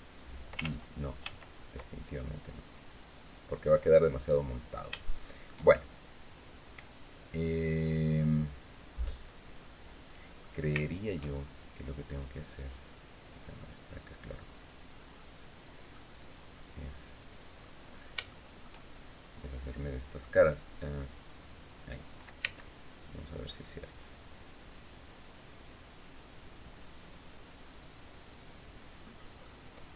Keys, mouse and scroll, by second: 1.2 ctrl+z, 2.5 click, 4.4-4.7 scroll down 3, 4.8 shift+middle click, 5.4 shift+scroll up 2, 7.2 scroll down 2, 8.7-10.3 middle drag, 10.5 shift+middle click, 11.8 click, 13.2 click, 14.9 middle click, 16.8 click, 17.3-17.9 scroll up 1, 17.9 shift+scroll up 1, 18.0 shift+middle click, 20.9 click, 22.1 c, 23.2-29.3 middle drag, 29.8 Escape.